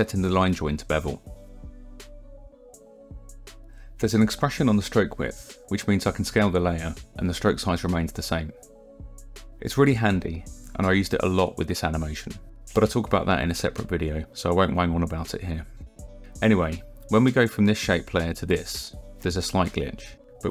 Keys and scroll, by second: 19.1 ctrl+Right.